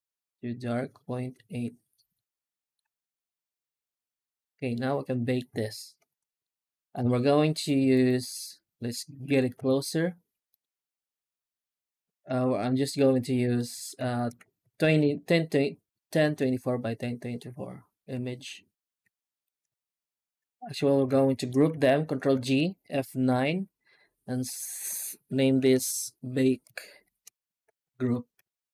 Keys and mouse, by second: 2.0 alt+middle click, 4.6-5.2 middle drag, 5.8 alt+h, 6.3-6.8 middle drag, 6.9 alt+a, 7.4 right click, 7.8 shift+right click, 8.3 right click, 9.1 g, 10.7 right click, 11.2 shift+right click, 11.7 shift+right click, 12.2 middle click, 12.8 shift+right click, 13.4 alt+middle click, 14.0 shift+middle drag, 14.5 ctrl+s, 14.9 ctrl+space, 16.1 Tab, 16.8 middle click, 17.9 Tab, 19.3 right click, 19.8 shift+right click, 20.5 alt+middle click, 21.1 shift+middle drag, 21.3 shift+click, 22.2 ctrl+g, 23.1 F9.